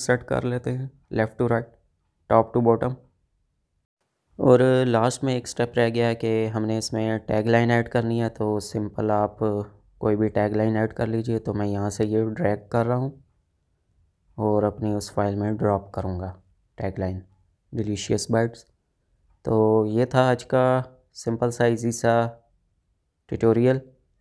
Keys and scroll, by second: 0.4 ctrl+g.